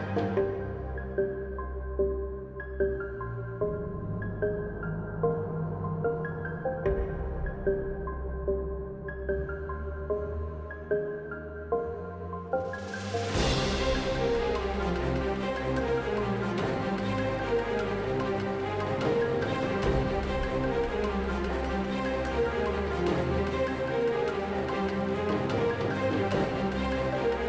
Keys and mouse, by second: 0.0-2.5 typing, 4.0 click, 4.2 KP_Decimal, 5.3 q, 5.5 a, 5.5 a, 5.6 q, 6.0 ctrl+z, 6.7 u, 8.6 a, 9.8 ctrl+Tab, 10.7 v, 12.5-13.4 drag, 12.5-14.3 typing, 15.5 Tab, 15.7 shift+space, 16.2 shift+space, 19.1 alt+z, 19.3-20.2 middle drag, 20.8 KP_Divide, 21.2 z, 21.3 z, 21.5 z, 21.9 z, 22.0 Tab, 22.7 KP_Divide, 24.1 KP_7, 24.6 ctrl+Tab, 25.5 z, 26.5 ctrl+l, 26.5 x, 26.9 Tab.